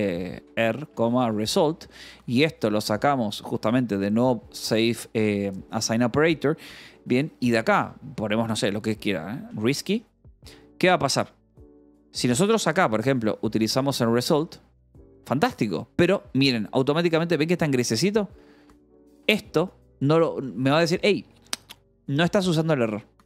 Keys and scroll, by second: 0.0-4.2 typing, 9.1-14.2 typing, 14.8 Escape, 15.7 k, 17.2-19.8 typing, 22.8 Escape.